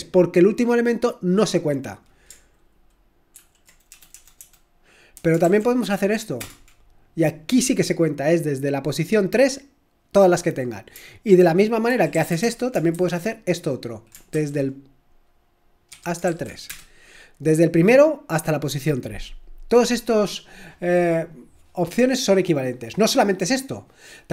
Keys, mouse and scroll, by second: 3.3 ctrl+p, 3.9 BackSpace, 4.1 BackSpace, 4.4 BackSpace, 5.4 ], 6.4 Return, 12.3-12.9 typing, 14.3 typing, 15.9-16.2 typing, 16.7 Return, 18.2 typing.